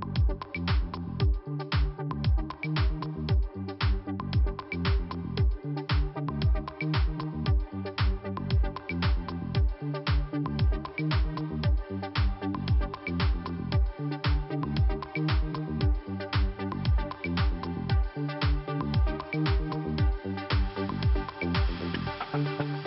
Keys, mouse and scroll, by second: 0.3 click, 1.0 click, 2.0 middle click, 2.7 click, 3.8 click, 5.3 click, 6.2 click, 7.0 click, 8.0 click, 8.1 click, 9.4 scroll up 1, 10.2 click, 10.8 click, 11.7 click, 12.6-13.6 scroll down 2, 13.6 middle click, 15.5 click, 17.3 click, 19.1 middle click, 20.8 middle click, 21.6 scroll down 2, 22.7 click.